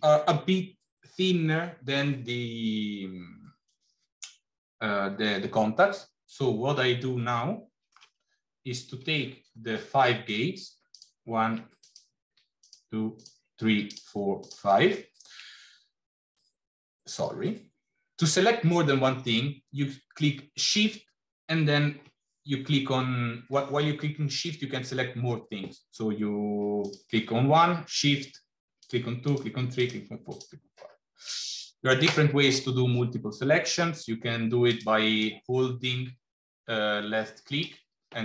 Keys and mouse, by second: 7.2 shift+middle click, 9.9 shift+middle click, 10.8 shift+click, 11.6 click, 12.4 shift+click, 14.3 shift+click, 26.7 click, 28.7 shift+click, 29.1 shift+click, 30.0 shift+click, 30.4 shift+click, 34.5 click, 35.0-37.6 drag.